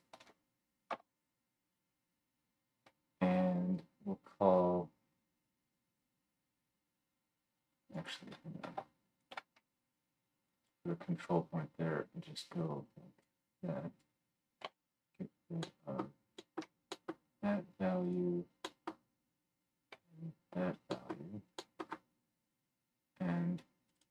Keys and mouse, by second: 8.1-10.0 drag, 14.2-15.5 drag, 14.6 x, 15.5-18.0 right drag, 18.0 middle click, 18.1-20.6 right drag, 20.0 x, 23.8-24.1 middle drag.